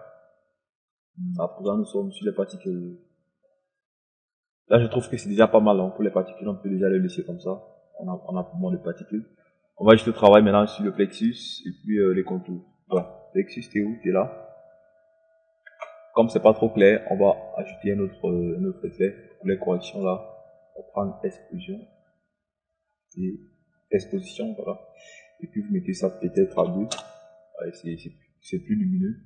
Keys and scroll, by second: 28.4 KP_2, 28.8 Return.